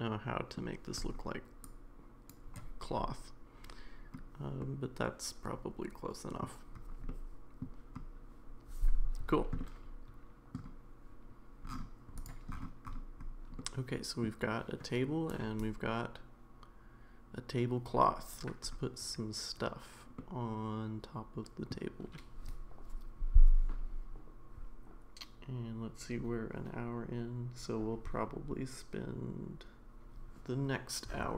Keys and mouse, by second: 1.7 click, 4.6-6.4 middle drag, 7.1-7.6 middle drag, 9.6-10.6 middle drag, 13.6 middle click, 20.2-21.7 middle drag.